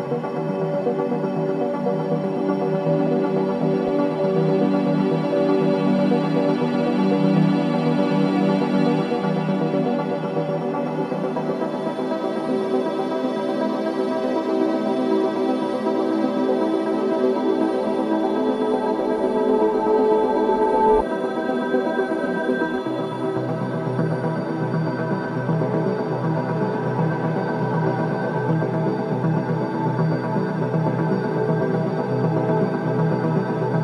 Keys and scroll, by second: 25.2 ctrl+d.